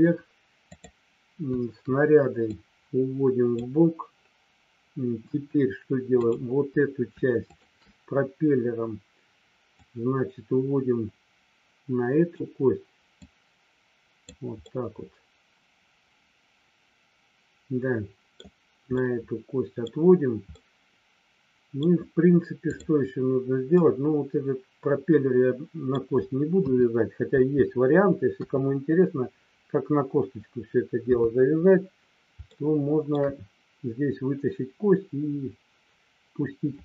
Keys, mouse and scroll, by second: 0.7 click, 2.4-3.5 drag, 7.5 shift+click, 9.7-12.4 drag, 13.3-14.3 drag, 14.6-18.3 middle drag, 19.0 middle click, 19.9 scroll down 1, 20.5-21.7 middle drag, 23.7-25.9 middle drag, 26.6 KP_2, 27.3 KP_4, 31.0 KP_3, 32.4 shift+middle click.